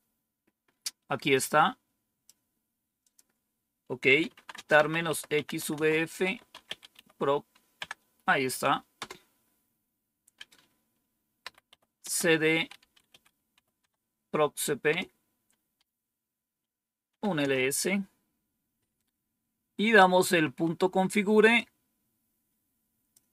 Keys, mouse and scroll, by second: 1.2 click, 2.9 click, 3.7-7.3 typing, 7.7 Tab, 11.3-11.9 typing, 13.0-15.3 typing, 16.7-17.6 typing, 21.4-23.0 drag.